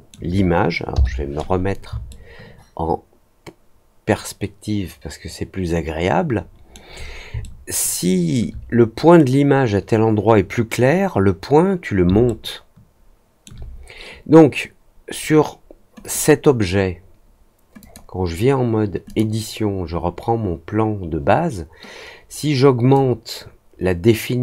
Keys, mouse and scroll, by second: 2.0-6.7 alt+middle drag, 7.3 alt+middle click, 12.2-13.4 alt+middle drag, 16.0 click, 17.7 click, 19.0 click, 22.9-24.4 drag.